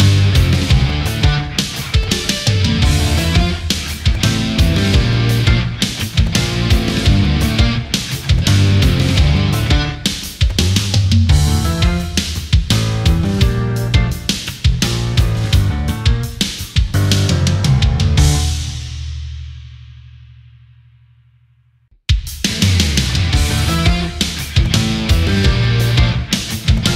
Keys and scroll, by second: 5.3 ctrl+z, 7.2 space, 15.4 space, 20.3 space.